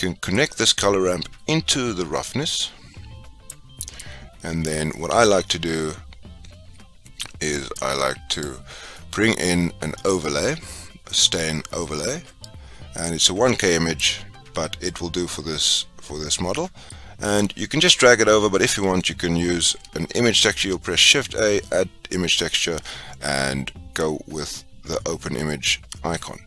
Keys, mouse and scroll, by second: 4.0 click, 17.4 click.